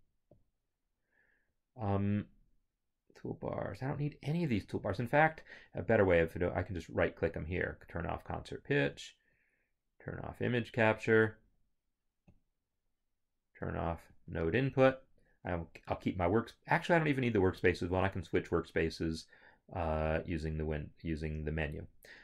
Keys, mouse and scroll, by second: 0.3 click, 4.7 click, 6.3 right click, 8.9 right click, 12.3 right click, 14.1 click, 18.6 right click, 20.1 click.